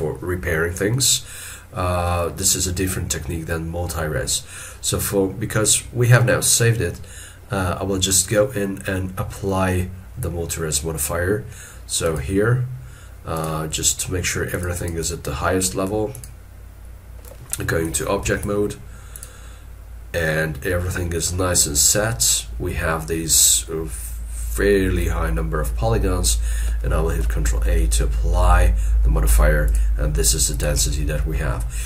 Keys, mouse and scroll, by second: 14.8 double click, 18.3 ctrl+Tab, 27.5 ctrl+a, 31.1 middle click.